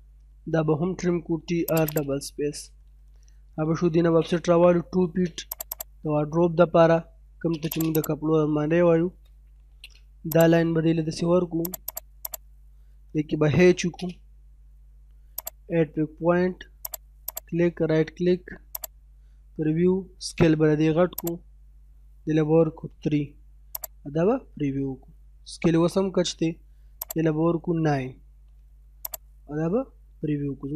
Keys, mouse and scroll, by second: 1.0-1.4 typing, 1.7 click, 2.2-2.6 scroll down 1, 2.6 middle click, 2.9-3.7 scroll up 1, 3.7-4.9 typing, 5.5 click, 6.2 middle click, 7.2 space, 7.8 click, 9.3 l, 9.5 space, 10.4 click, 11.8 right click, 12.2 click, 13.5 h, 13.6 space, 15.3 click, 17.2 right click, 18.7 click, 19.4 scroll up 1, 21.2 click, 22.5 3, 23.8 click, 24.4-25.3 scroll down 1, 27.0 click, 28.1 9, 29.1 click, 30.0-30.4 scroll down 1, 30.4 middle click.